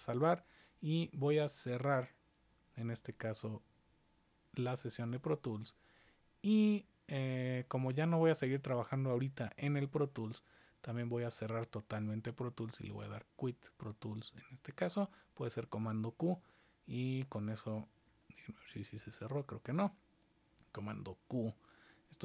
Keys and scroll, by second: 3.5 shift+super+w, 18.0 super+Tab, 20.8 super+q.